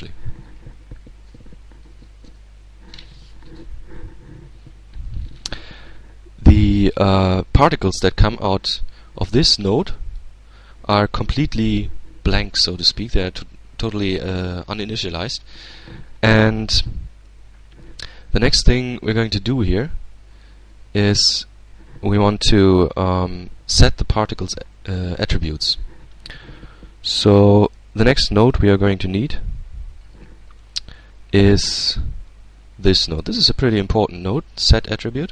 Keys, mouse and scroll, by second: 6.8-7.8 drag, 9.1-10.3 drag, 12.6-15.6 drag, 20.3 shift+a, 33.0 click, 33.8-35.3 drag.